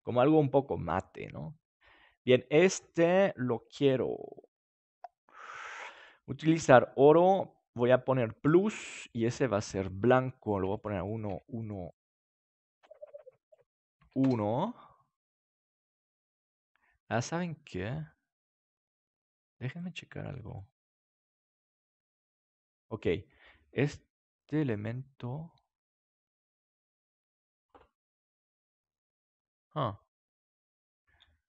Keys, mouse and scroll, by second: 6.2-8.3 drag, 8.5-11.4 drag, 15.1 middle click, 17.3 middle click, 17.5-19.7 middle drag, 19.7-21.5 drag, 24.7-27.1 drag, 28.9-30.6 middle drag.